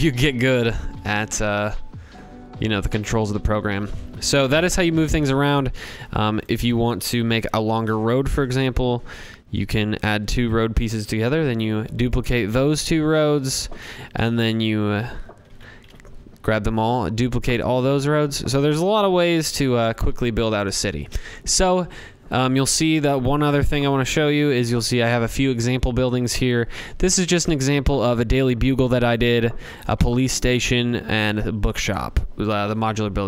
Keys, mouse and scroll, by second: 0.0 ctrl+v, 0.0 ctrl+z, 0.3 ctrl+z, 1.2 scroll, 1.9 scroll, 2.5 scroll, 5.4 click, 6.1 scroll, 6.2 ctrl+c, 6.8 ctrl+v, 8.6 click, 9.4 shift+click, 10.2 ctrl+c, 10.4 ctrl+v, 12.7 click, 13.4 shift+click, 13.8 shift+click, 14.4 ctrl+c, 14.8 ctrl+v, 17.2 click, 17.7 click, 18.3 ctrl+z, 18.7 ctrl+z, 19.0 ctrl+z, 19.3 ctrl+z, 19.6 ctrl+z, 20.0 ctrl+z, 21.7-22.4 scroll, 27.3 middle click, 28.0-30.1 drag.